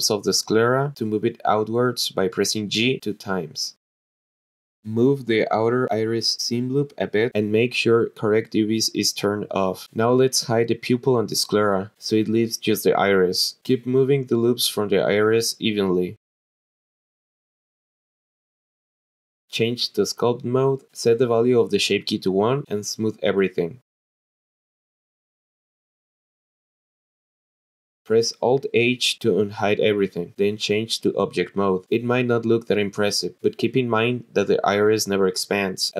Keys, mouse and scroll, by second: 0.1 click, 0.6 click, 1.0 middle click, 1.7 alt+shift+click, 3.0 g, 3.2 g, 4.1 click, 4.3 alt+shift+click, 4.5 g, 4.9 click, 5.1 g, 5.2 g, 5.5 alt+shift+click, 6.7 g, 6.8 g, 7.9 click, 11.6 click, 12.6 click, 13.3 l, 13.6 h, 14.1 click, 14.8-15.1 scroll up 1, 15.2 alt+shift+click, 15.4-18.9 typing, 15.7 click, 15.8 alt+shift+click, 16.2 click, 16.3 alt+shift+click, 16.7 click, 16.8 alt+shift+click, 17.1 click, 17.2 click, 17.3 alt+shift+click, 17.8 click, 17.8 alt+shift+click, 18.3 alt+shift+click, 18.7 click, 18.8 alt+shift+click, 20.1-21.2 drag, 22.0 click, 25.1 click, 25.4-25.7 scroll down 3, 25.7 shift+click, 28.5 alt+h, 31.0 click.